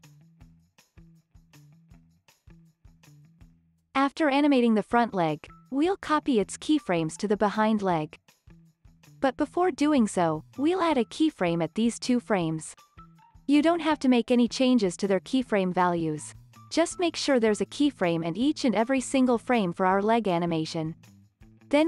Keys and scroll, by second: 2.3 space, 2.6 super+s, 12.5 x, 13.0 alt+x, 13.6 alt+z, 14.3 alt+x, 15.0 alt+x, 15.6 alt+z, 16.1 super+z, 17.1 super+s, 17.5 z, 18.1 z, 18.7 z, 19.6 super+c, 20.2 super+v.